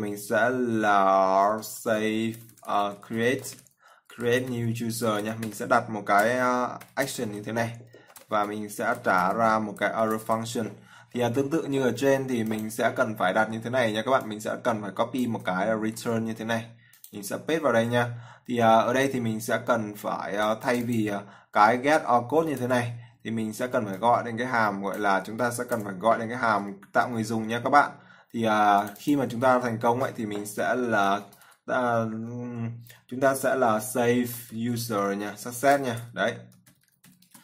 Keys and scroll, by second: 16.3 ctrl+c, 17.7 ctrl+v.